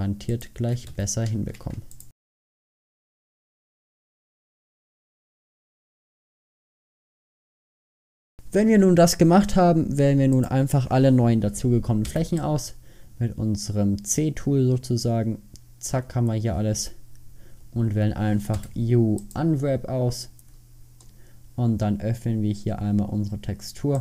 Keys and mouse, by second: 1.0 f, 2.3-3.3 typing, 4.4 shift+f, 5.0 f, 5.2 f, 5.4 f, 5.7 ctrl+z, 6.5-8.3 typing, 10.6-14.2 drag, 12.2 c, 17.3 middle click, 17.9 middle click, 18.7 u, 19.9 middle click, 21.2 middle click, 21.3 middle click.